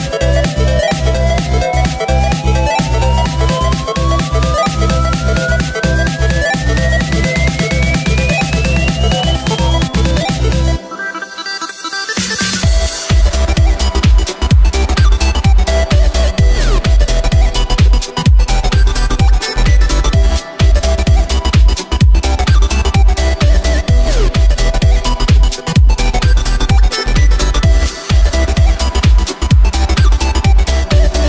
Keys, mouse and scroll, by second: 1.9 Tab, 2.6 g, 4.6 alt+d, 5.0 g, 10.9 shift+right click, 11.6 g, 13.8 scroll down 1, 13.9 scroll up 2, 14.0-14.8 scroll down 2, 14.8 click, 15.1 shift+a, 18.4 shift+a, 21.2 1, 25.1 g, 28.5 e.